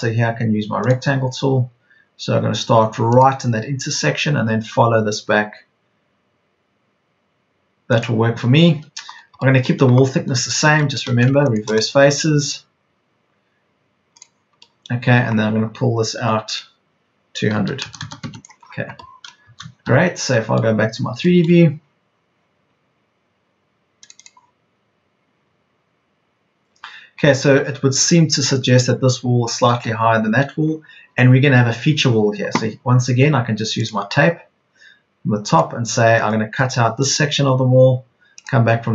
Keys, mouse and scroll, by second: 16.1 p, 17.5 KP_2, 17.7 KP_0, 19.5 Escape.